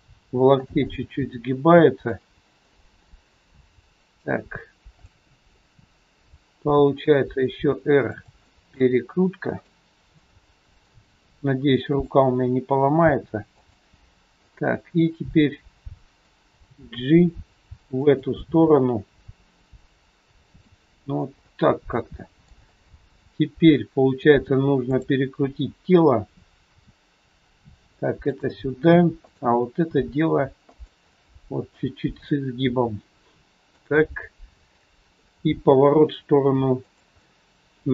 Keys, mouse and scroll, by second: 0.8 middle click, 2.7 middle click, 4.7 scroll down 1, 5.0 middle click, 6.7 r, 8.4 middle click, 10.2 middle click, 11.0 r, 13.2 r, 14.4 middle click, 16.4 g, 18.3 middle click, 21.0 scroll up 1, 21.4 middle click, 22.7 scroll up 2, 24.0 scroll up 1, 24.8 click, 26.7 r, 29.2 click, 29.9 r, 31.0 middle click, 31.9 scroll down 3, 32.1 scroll up 1, 32.3 middle click, 33.8 click, 34.7 middle click, 35.4 r, 37.2 middle click.